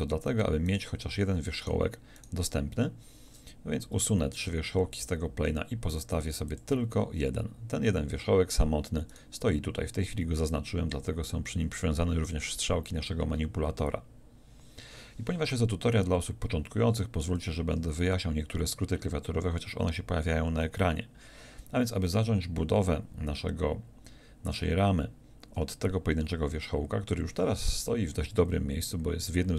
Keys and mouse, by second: 5.0 x.